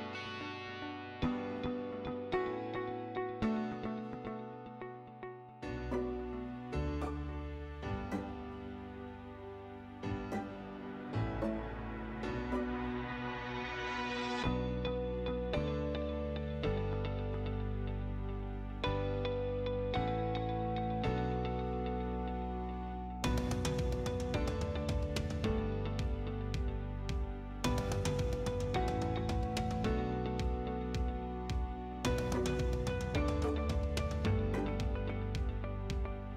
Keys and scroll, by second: 4.7 t, 6.3 space, 9.9 6, 10.3 ', 11.0 Return, 18.2 6, 19.3 Return, 21.9 space, 25.1 o, 25.4 space, 26.3 6, 26.5 Return, 28.0 Escape, 29.2 t, 29.5 space, 33.2 Escape, 35.3-36.2 typing.